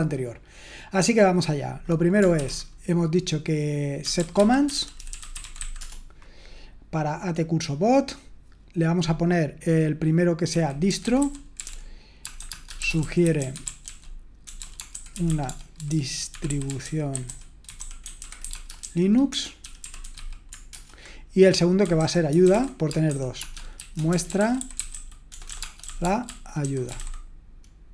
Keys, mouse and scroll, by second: 4.7-6.1 typing, 7.3-10.8 drag, 10.5-20.1 typing, 20.7 shift+Return, 21.6-27.5 typing.